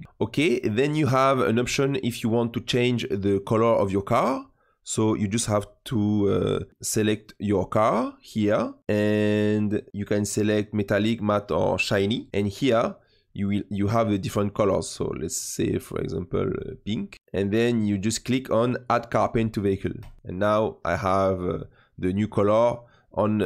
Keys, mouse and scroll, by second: 0.0-1.9 middle drag, 1.9-2.4 scroll up 2, 2.4-4.4 scroll down 2, 7.0 click, 7.8-8.8 middle drag, 8.8-9.7 drag, 9.9-14.4 drag, 19.9 click, 20.3-23.3 middle drag.